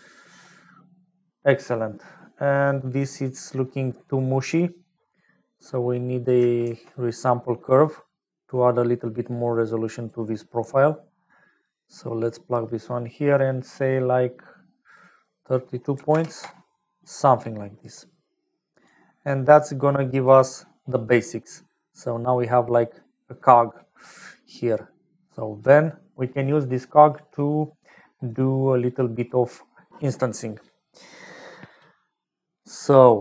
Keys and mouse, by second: 3.2 middle click, 4.0 middle click, 5.8 click, 6.6 shift+a, 15.1-17.4 drag, 18.4 click, 19.3 click, 19.9 click, 21.1-22.9 middle drag, 24.5 middle click, 25.3 click.